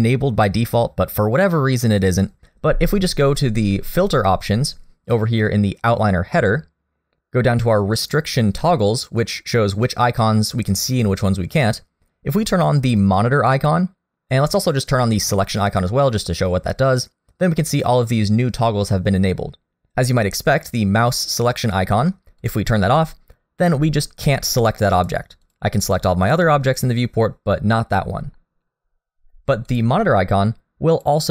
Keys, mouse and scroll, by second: 7.1 click, 22.4 click, 24.6 click, 25.0 click, 25.5 click, 25.8 click, 26.3 click, 26.8 click, 29.7 click, 31.0 click.